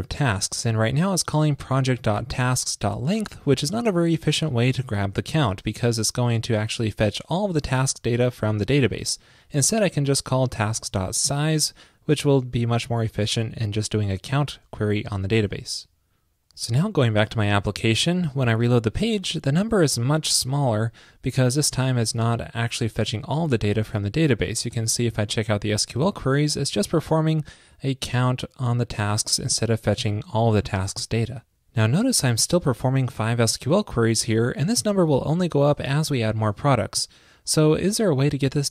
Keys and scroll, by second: 15.5 super+s.